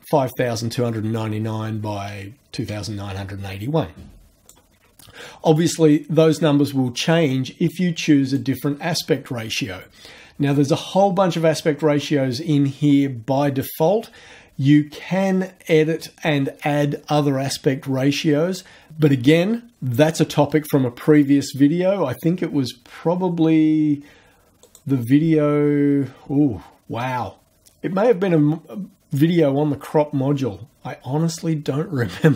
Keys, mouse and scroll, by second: 5.5-6.9 drag, 8.3 click, 24.6 click.